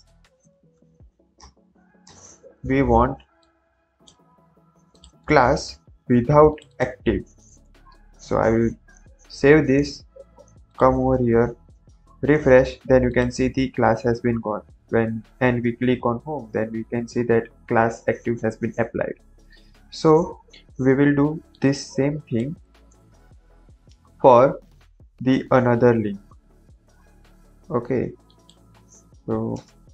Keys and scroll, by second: 0.0-1.1 typing, 1.3 Return, 1.9 Return, 4.3 ctrl+c, 5.1 Tab, 5.9 ctrl+v, 7.5 BackSpace, 9.0 ctrl+s, 22.8 ctrl+c, 29.6 Return.